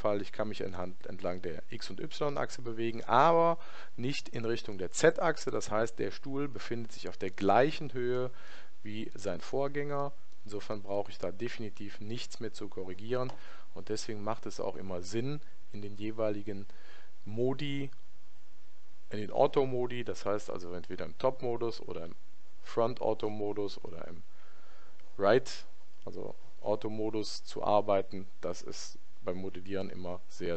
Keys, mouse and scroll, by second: 7.3-12.2 middle drag, 12.1 KP_1.